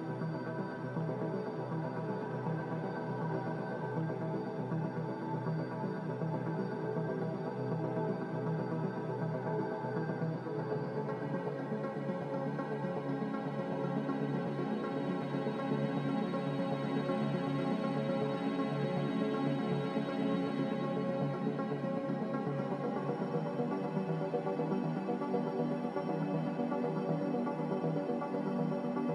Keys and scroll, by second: 2.8 z, 4.3 5, 8.4 a, 11.7-12.1 typing, 12.8 Return, 14.6 g, 16.3 Escape, 19.0 Escape, 19.1 Escape, 19.2 Escape, 20.4 z, 20.8 Escape, 21.2 Escape, 22.1 z.